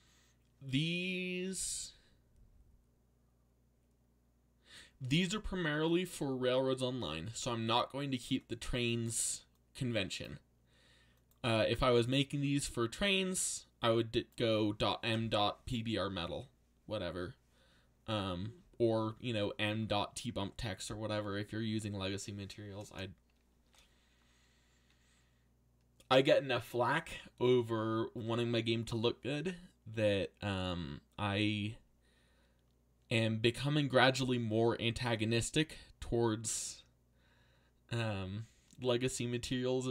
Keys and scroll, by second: 22.9 BackSpace.